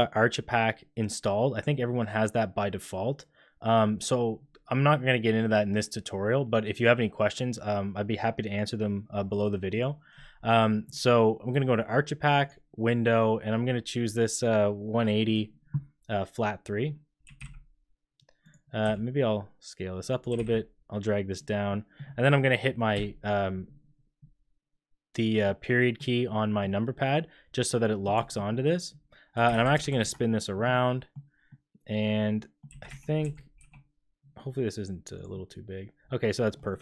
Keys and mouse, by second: 9.7 click, 12.4-15.7 drag, 17.2 g, 18.8 s, 20.3 g, 21.6-21.9 drag, 22.9 KP_Decimal, 25.4 click, 26.2 click, 26.8-28.0 middle drag, 28.1 shift+middle drag, 28.4 middle click, 29.3 r, 30.7 click, 30.9 middle click, 31.4-32.6 middle drag, 32.6 g, 35.3-36.5 middle drag.